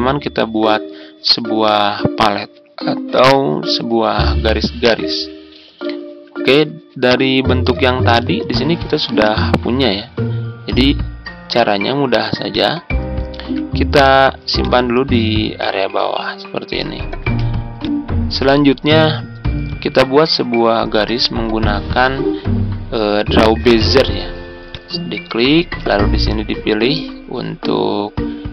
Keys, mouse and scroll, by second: 6.0-6.4 ctrl+scroll down 1, 7.0 click, 8.2-13.2 drag, 13.4 ctrl+z, 13.9-17.2 drag, 17.2 z, 17.7 click, 19.3-23.8 scroll down 1, 24.6 click.